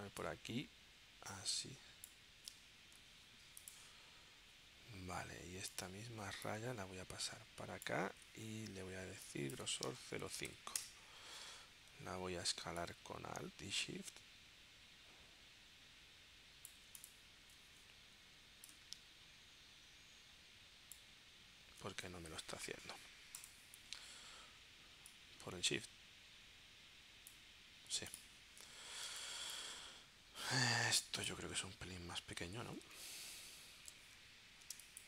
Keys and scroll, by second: 3.0 v, 10.0 0, 10.8 Return, 29.1 space, 34.8 space.